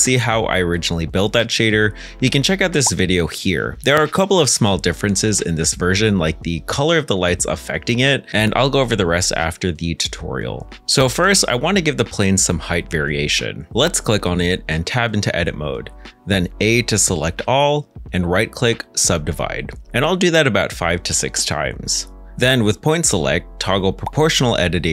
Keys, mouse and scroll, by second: 2.0 g, 2.2 shift+z, 4.6 Escape, 8.0 ctrl+z, 8.7 middle click, 10.4 shift+middle click, 11.7 middle click, 14.8 Tab, 16.3 a, 17.8 right click, 23.9 1.